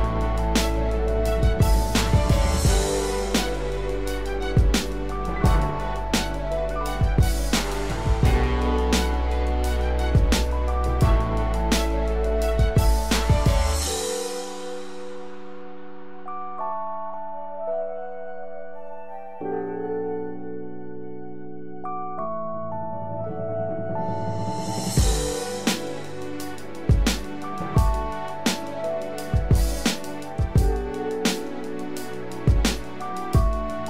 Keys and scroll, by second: 11.3 ctrl+-, 17.9 ctrl+z, 18.9 ctrl+alt+z.